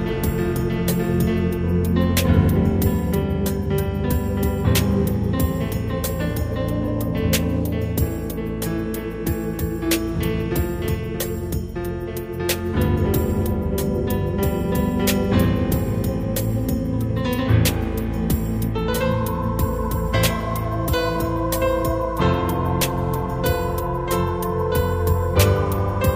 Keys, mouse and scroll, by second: 6.2 right click, 8.0 g, 9.7 click, 14.5 g, 16.3 click, 18.6 g, 20.0 click.